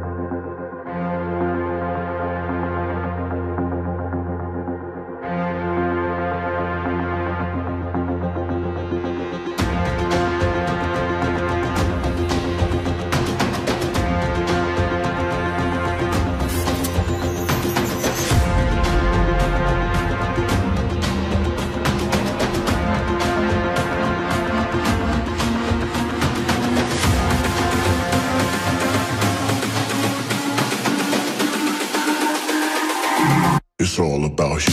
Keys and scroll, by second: 15.8 Tab, 25.7 Left, 27.5 Return.